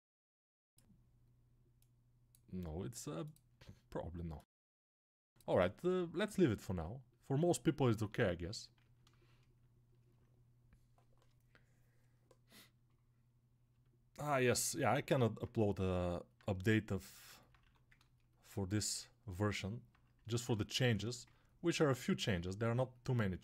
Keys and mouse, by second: 17.5 1.